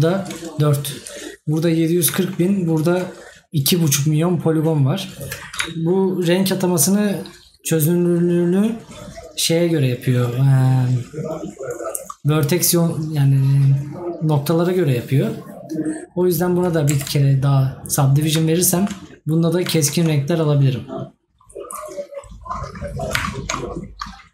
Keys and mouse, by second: 18.7 right click.